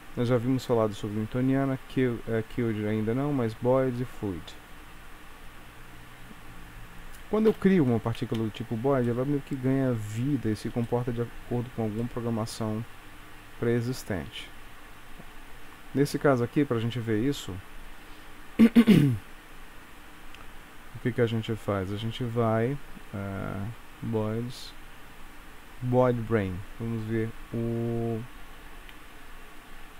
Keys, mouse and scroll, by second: 0.3 click, 5.6-6.3 scroll down 2, 6.3 scroll down 1, 7.6 shift+Left, 8.3 space, 9.1 middle click, 10.2-10.9 scroll up 3, 10.9 shift+middle click, 12.1 middle click, 15.5 Escape, 17.7 scroll down 2, 21.7-22.7 scroll down 2, 22.7-23.0 scroll down 3, 24.9-26.0 scroll up 2, 26.0 click, 26.6-28.6 scroll down 1, 29.0 scroll down 2, 29.1 space.